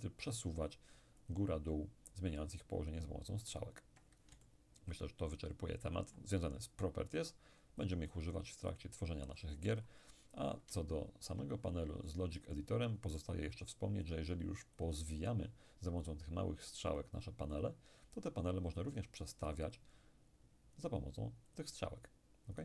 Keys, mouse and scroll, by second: 1.3 click, 2.6 click, 4.4-7.1 ctrl+middle drag, 7.9-10.8 drag, 10.8-12.4 ctrl+scroll up 1, 12.4 scroll up 1, 12.5-14.2 middle drag, 14.8 click, 16.1-18.6 drag, 19.1 click, 20.8-22.6 drag.